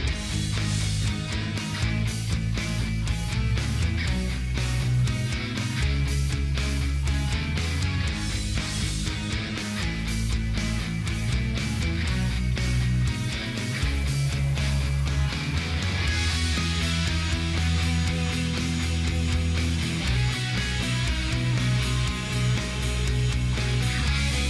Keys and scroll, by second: 5.5 ctrl+d.